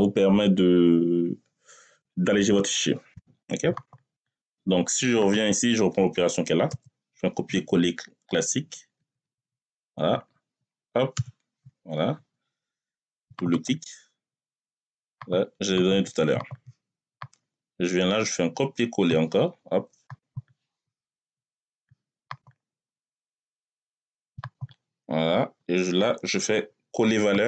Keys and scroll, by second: 6.5 ctrl+c, 8.8 Right, 11.0 ctrl+v.